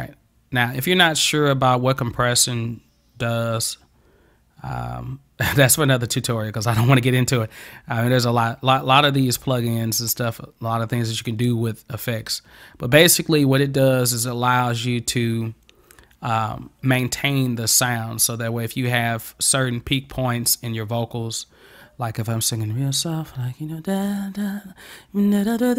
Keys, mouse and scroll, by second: 0.7 click.